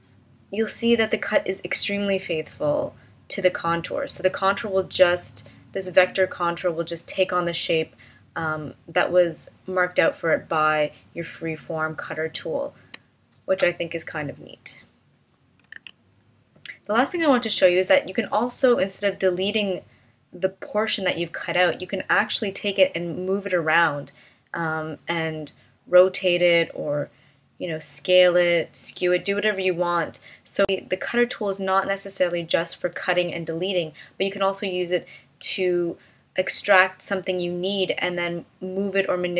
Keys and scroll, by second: 15.8 super+z.